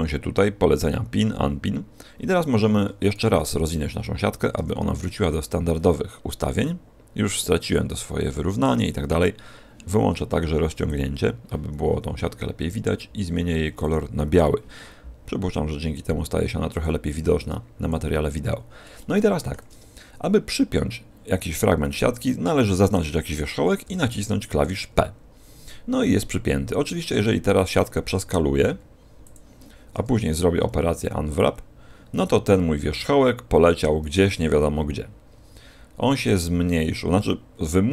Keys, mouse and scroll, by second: 4.5 u, 10.8 click, 13.7 click, 16.6 click, 17.3 click, 18.2-18.9 scroll up 2, 18.9 shift+middle click, 21.8 right click, 27.8 a, 28.0 a, 28.5 s, 29.2 click, 30.5 u.